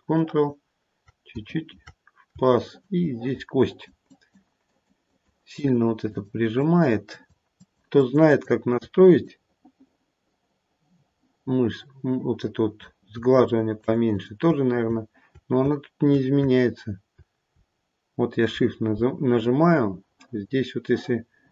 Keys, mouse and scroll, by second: 1.0 ctrl+click, 1.5 ctrl+click, 2.5 shift+click, 2.9 shift+click, 3.6 shift+click, 4.0 shift+click, 4.7 shift+click, 5.0 shift+click, 5.5 shift+click, 6.0 shift+click, 6.5 shift+click, 7.1 shift+click, 7.5 shift+click, 8.0 shift+click, 8.2 shift+click, 9.1 click, 13.4 shift+click, 13.7 shift+click, 14.0 shift+click.